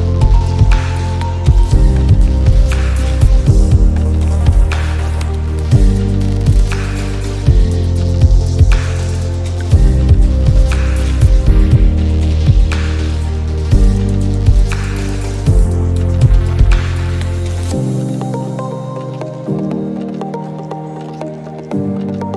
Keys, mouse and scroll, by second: 0.3 shift+click, 1.2 shift+click, 1.5 Left, 2.3 Up, 2.8 Left, 3.1 Up, 3.8 space, 3.9 click, 4.0 space, 4.5 click, 4.8-5.2 alt+scroll down 1, 5.3 space, 5.4 click, 5.7 space, 7.4-10.8 drag, 10.8-12.1 drag, 12.1-15.0 drag, 15.0 click, 16.1 alt+scroll up 1, 16.8-18.5 drag, 18.5 space, 19.1-20.7 drag, 21.3-22.3 drag.